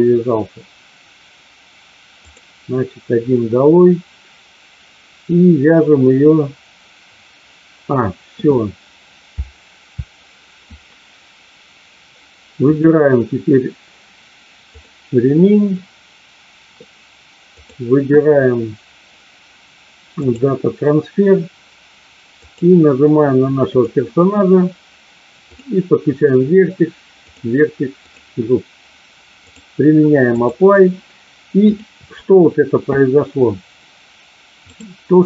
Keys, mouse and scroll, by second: 17.7-20.3 drag, 22.4 click, 25.4 click, 27.9 click, 29.6-30.6 drag, 31.6 click, 34.7 click.